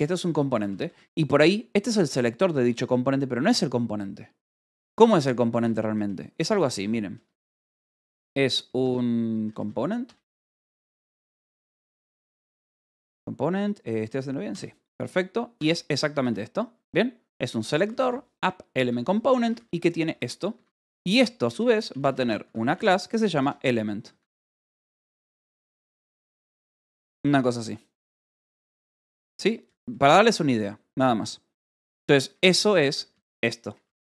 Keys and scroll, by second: 0.0-0.6 typing, 0.9 Escape, 3.1 j, 5.5 a, 5.8 Return, 9.2-11.8 typing, 18.4 shift+v, 18.7 Escape, 19.0 j, 19.5 j, 20.4 Escape, 20.6-25.6 typing, 23.7 ctrl+g, 26.9 Escape, 27.3 l, 27.9 o, 28.9 Escape, 29.1 k, 30.1 k, 30.6 j, 32.5 j, 32.9 k.